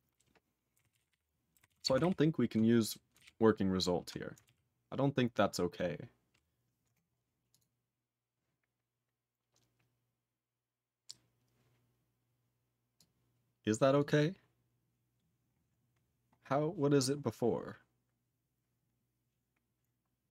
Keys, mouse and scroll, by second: 0.7 ctrl+e, 0.9 ctrl+e, 0.9 ctrl+p, 1.1 ctrl+p, 1.7 ctrl+s, 2.0 alt+b, 3.2 alt+b, 4.4 ctrl+a, 7.5 click, 7.6 click, 13.0 click, 14.0 click, 15.5-17.1 scroll up 13, 19.0 scroll down 11, 20.0-20.3 scroll down 3.